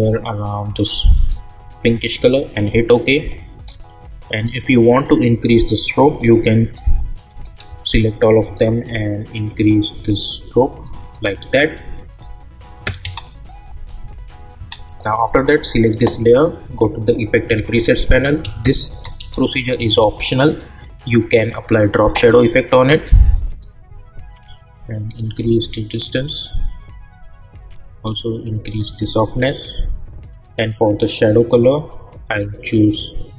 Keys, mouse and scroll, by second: 3.6 scroll up 1, 6.0 click, 8.2 shift+click, 10.0-11.2 drag, 13.0 space, 14.8 click, 17.5 ctrl+a, 17.8-19.7 typing, 21.3-33.3 drag.